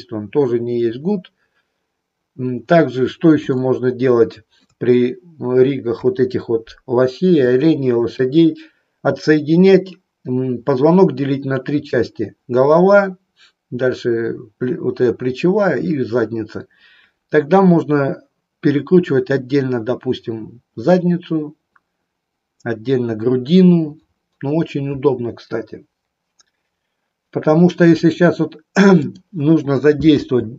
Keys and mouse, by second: 3.6-4.8 shift+middle drag, 6.0 KP_3, 7.5 shift+middle click, 28.9 click, 30.3 r.